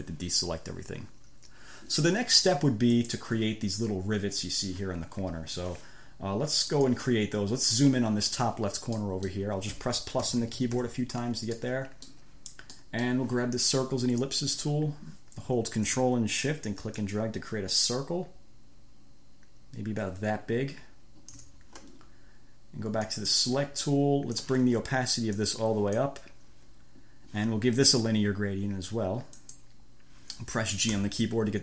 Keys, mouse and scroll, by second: 0.1 click, 3.2 click, 7.0 click, 9.2-9.8 scroll up 2, 10.4 =, 11.8 click, 12.4 scroll up 2, 13.0 click, 14.4 click, 17.2-21.8 ctrl+shift+drag, 23.3 click, 24.1 click, 25.7 click, 29.6 click, 31.2 g.